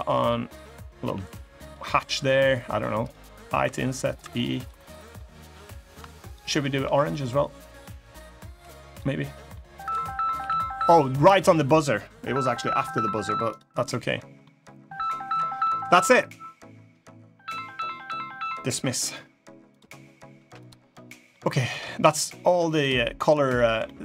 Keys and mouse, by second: 0.8 g, 1.7 middle click, 2.7 click, 3.3 i, 3.9 e, 4.6 middle click, 5.6 click, 6.0 shift+click, 6.6 g, 9.1 middle click, 10.1 g, 11.1 click, 11.5 middle click, 12.3 middle click, 13.3 click, 13.6 middle click, 15.3 middle click, 19.4 click, 20.4 click, 20.7 middle click, 21.4 Tab, 22.1 middle click, 22.9 middle click, 23.6 middle click.